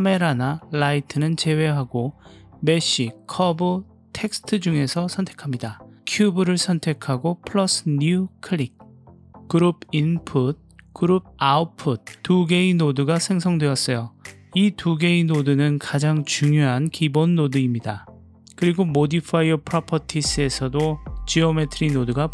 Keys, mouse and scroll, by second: 1.4-3.3 drag, 7.4-9.2 drag, 10.7 click, 11.4-22.3 drag.